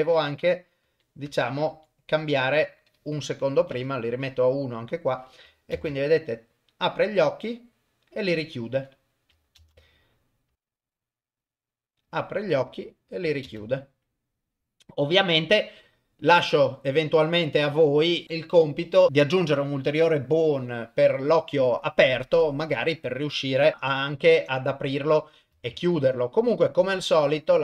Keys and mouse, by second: 0.8 Up, 1.3 Down, 1.7 Up, 2.2 Left, 3.4 click, 5.2 drag, 5.7 shift+space, 9.6 shift+space, 10.5 shift+Left, 13.4 shift+space, 14.6-15.3 drag, 23.5 click, 25.7 ctrl+Tab, 26.5 click.